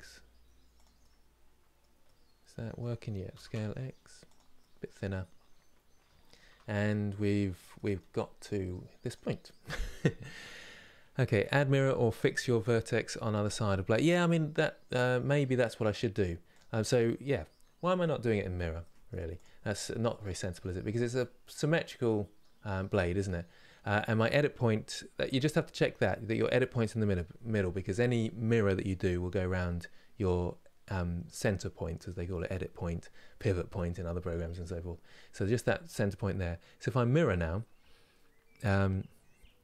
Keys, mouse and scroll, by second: 0.7-3.0 middle drag, 3.0 s, 4.2-6.2 middle drag, 6.2 Tab, 6.5 scroll down 4, 7.4-8.7 middle drag, 8.7 click, 9.2-16.2 middle drag, 16.2 click, 18.5 middle click, 19.0 click, 19.4 middle click, 20.1 scroll up 2, 20.6 click, 20.8-24.8 middle drag, 24.8 KP_7.